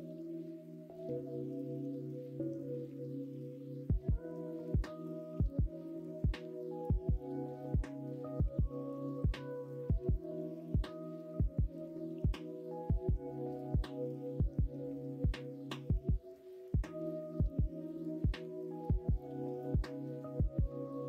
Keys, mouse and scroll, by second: 1.0 alt+z, 1.3 middle click, 1.8 ctrl+r, 5.3 3, 8.4 2, 10.0 ctrl+b, 13.0 3, 15.4 middle click, 17.0 alt+s, 19.5 middle click, 20.0 alt+z, 20.3 middle click, 20.9 middle click.